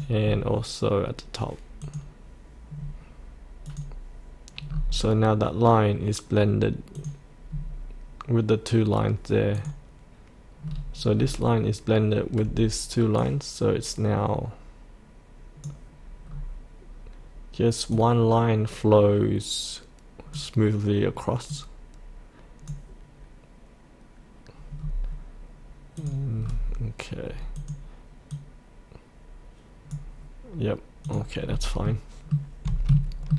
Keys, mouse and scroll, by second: 0.2-1.8 scroll down 1, 1.8 click, 2.7-3.6 scroll down 1, 3.6 click, 4.6-5.2 scroll up 1, 6.9 click, 7.5-9.5 scroll down 1, 9.5 click, 10.6-11.1 scroll down 1, 13.2-16.2 drag, 16.2-17.9 scroll down 1, 17.9-23.3 drag, 24.8-26.0 scroll up 1, 26.0 click, 26.4 scroll down 1, 27.6-30.4 drag, 31.4 scroll up 1, 31.8 middle click.